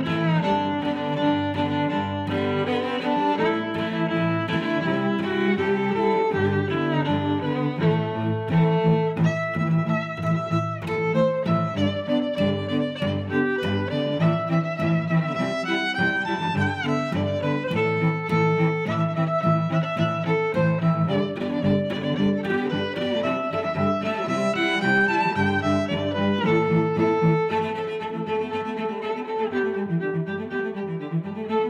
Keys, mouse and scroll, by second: 0.1 g, 1.7 click, 2.2 s, 2.9 click, 3.4 g, 4.4 click, 4.9 middle click, 6.5 g, 8.0 click, 8.5 x, 8.8 click, 9.6 click, 9.8 s, 10.6 click, 11.2 middle click, 12.3 click, 13.1 g, 13.2 y, 15.7 click, 16.7 click, 18.1 click, 19.3 middle click, 20.3 click, 20.7 click, 21.6 click, 22.4 2, 23.7 click, 26.1 click, 26.7 click, 27.4 click, 28.0 click, 29.0 click, 30.0 right click, 30.5 click.